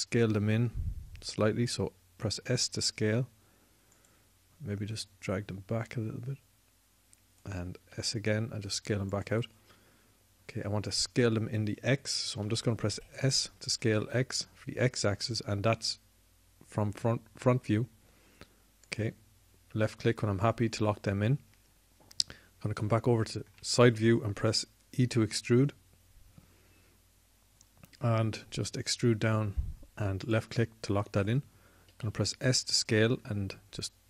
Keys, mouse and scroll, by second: 0.4 s, 4.7-5.7 drag, 8.6 s, 21.1-23.7 drag, 25.8 e, 32.7 s.